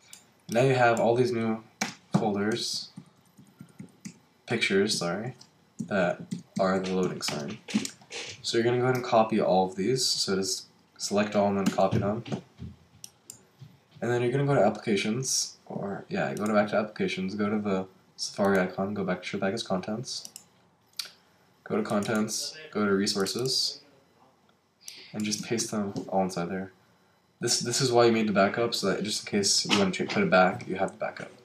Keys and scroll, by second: 2.5 Right, 11.6 super+c, 25.6 super+v.